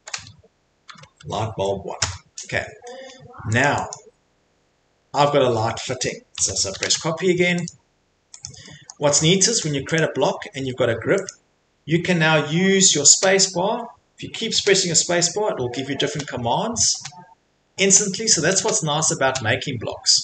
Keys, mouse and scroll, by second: 0.9 typing, 2.0 Return, 3.6 click, 3.9 click, 4.3-5.3 scroll, 6.1 middle click, 6.4-6.7 typing, 7.7 click, 7.7-8.3 scroll, 8.4 click, 8.9 middle click, 9.0 Escape, 9.1 Escape, 9.6 click, 10.0 click, 11.3 click, 20.0 Escape.